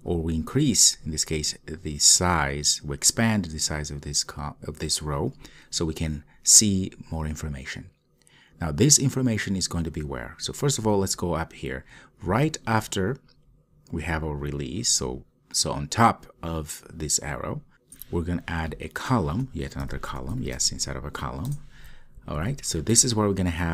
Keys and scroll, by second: 21.7 Return.